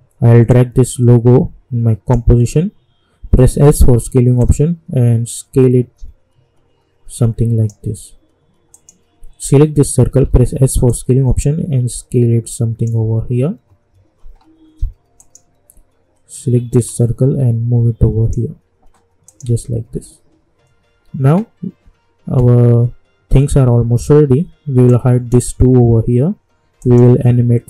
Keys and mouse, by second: 3.5 s, 4.4-8.7 drag, 10.2 s, 10.9-19.8 drag, 19.8 u, 24.8-26.8 drag.